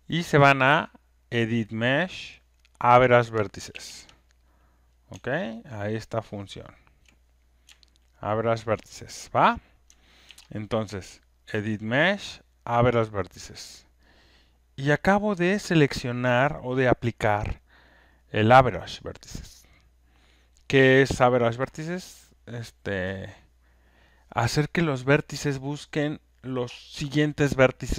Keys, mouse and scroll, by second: 1.5 click, 3.7 ctrl+F1, 4.4 click, 7.0 ctrl+shift+click, 8.7 click, 10.2 ctrl+F1, 11.7 click, 13.0 click.